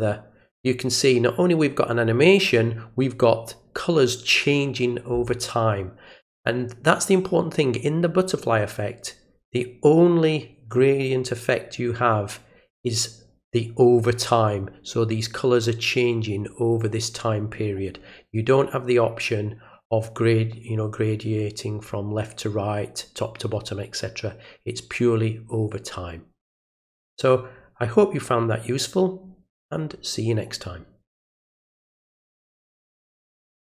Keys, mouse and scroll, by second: 32.6 click, 33.6 click.